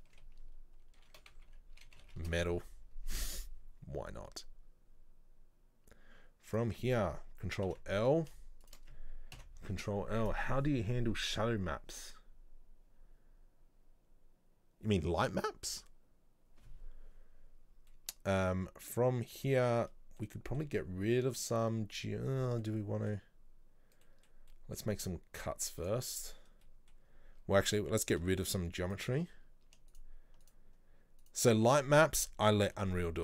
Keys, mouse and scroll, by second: 6.6 right click, 7.8 ctrl+l, 8.7 shift+right click, 9.4 ctrl+l, 18.0-22.2 middle drag, 22.2-22.6 scroll down 2, 22.7-25.9 middle drag, 25.9 click, 26.1 middle click, 26.5-27.7 scroll up 2, 26.7 middle click, 27.7 alt+right click, 28.9-30.1 alt+shift+right drag, 30.5 alt+shift+right click, 31.3 alt+shift+right click.